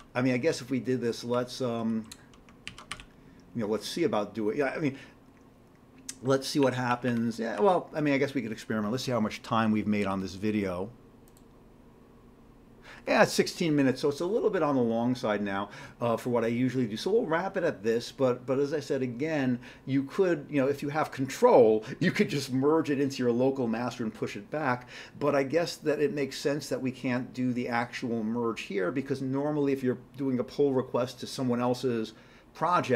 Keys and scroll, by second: 2.4-3.4 typing, 6.7 Up, 7.3 Up, 7.5 Down.